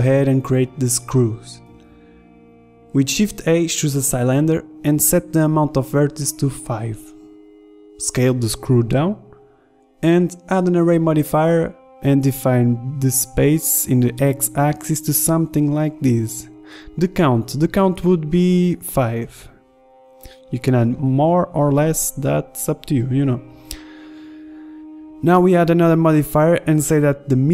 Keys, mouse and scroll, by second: 0.9 shift+s, 1.7 Tab, 2.4 KP_1, 2.5 shift+a, 6.5 r, 8.4 s, 9.5-11.3 drag, 11.5 middle drag, 11.8-12.1 drag, 13.2-14.5 middle drag, 14.5-15.7 drag, 15.7-18.3 middle drag, 18.3-23.4 drag, 23.4 middle click, 23.9 click, 24.3 KP_1, 25.2 Tab.